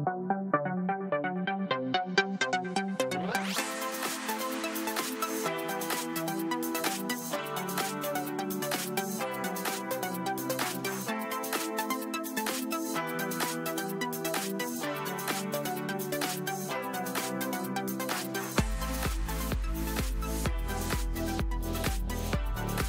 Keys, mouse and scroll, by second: 0.9 click, 5.7 click, 14.1 click, 15.1-16.7 typing, 17.5 Return, 20.5 click.